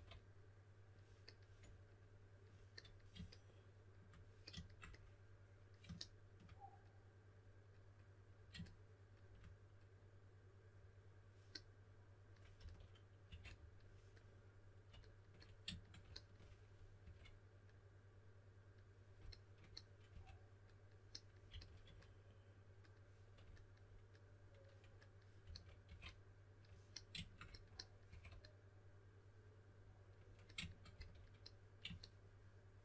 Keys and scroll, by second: 0.0-0.3 typing, 12.6-13.7 typing, 17.0 2, 20.1 2, 21.2-22.3 typing, 25.2-26.3 typing, 28.1 2, 30.9 s.